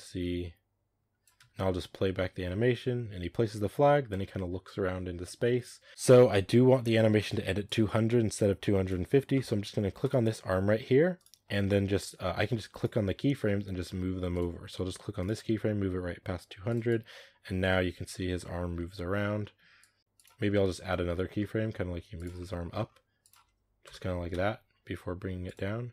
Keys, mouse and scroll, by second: 1.2 space, 2.2-4.4 scroll down 1, 5.9 right click, 7.5-9.9 drag, 9.9 right click, 11.0 right click, 12.6 right click, 13.2 g, 15.0 right click, 15.3 g, 16.7-17.6 drag, 17.6 space, 19.7-20.0 drag, 20.0 r, 20.4-20.8 middle drag, 20.8 scroll up 1, 20.9-21.6 middle drag, 21.6 r, 22.2-23.7 middle drag, 22.7 scroll down 1, 22.9 r, 23.7 KP_0, 24.2 space, 25.3-25.9 drag.